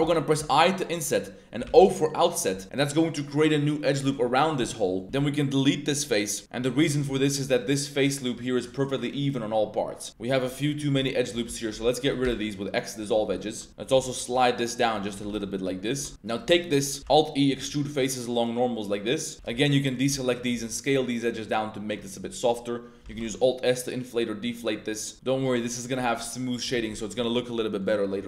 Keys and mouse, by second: 0.4 i, 1.6 o, 4.0-4.4 drag, 4.6 middle click, 5.0 middle click, 5.0 x, 6.1 middle click, 7.1 3, 7.6 alt+click, 8.6 drag, 10.1 2, 11.0 alt+click, 11.5 alt+shift+click, 11.9 alt+shift+click, 12.2 x, 13.3 middle drag, 13.7 1, 13.8 g, 14.0 g, 14.7 shift+click, 15.1 g, 15.2 g, 16.1 alt+3, 16.2 alt+click, 16.5 drag, 17.0 alt+e, 19.3 2, 19.6 alt+shift+click, 19.9 alt+shift+click, 20.5 s, 22.2 click, 23.1 alt+shift+s, 25.1 Tab, 25.3 middle click, 26.2-26.5 middle drag, 26.7 Tab, 27.2 middle click, 27.6 middle click.